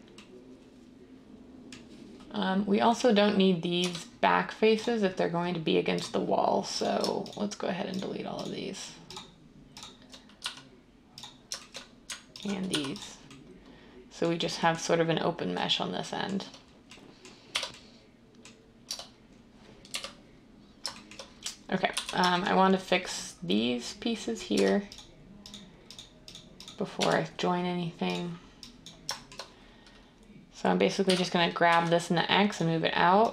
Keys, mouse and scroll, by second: 3.7 Tab, 10.4 x, 12.6 x, 17.4 Tab, 18.8 Tab, 19.9 1, 21.9 z, 24.6 Tab, 27.8 Tab, 31.0-31.7 typing.